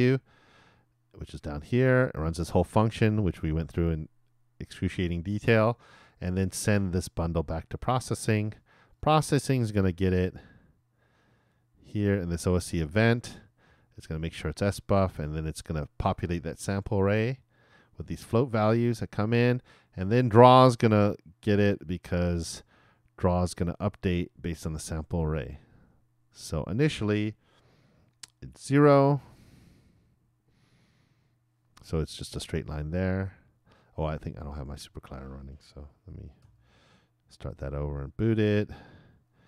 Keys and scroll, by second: 29.2 super+r, 36.4 shift+super+l, 38.1 super+b.